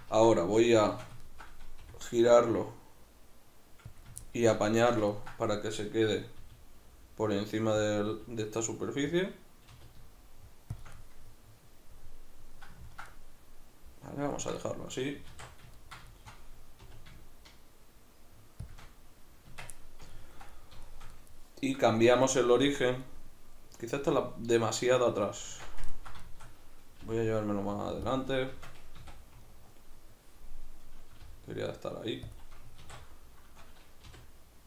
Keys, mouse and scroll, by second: 0.1 Tab, 0.5 a, 1.8 r, 4.0 click, 6.4 g, 7.9 click, 8.1 r, 9.2 click, 9.7 r, 10.9 shift+click, 10.9-18.7 middle drag, 15.3 alt+q, 16.8 r, 18.7 shift+click, 19.5 Tab, 19.8-28.1 middle drag, 25.5 alt+q, 27.0 g, 28.1 click, 28.5 Tab, 29.0 a, 32.4 click, 32.8 alt+q, 34.1 r.